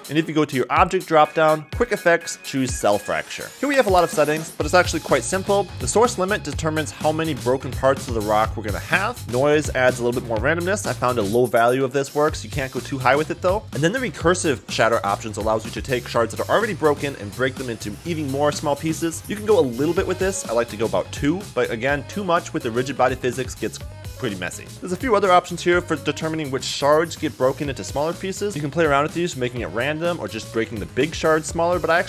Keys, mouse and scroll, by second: 1.2-5.5 drag, 17.5 click.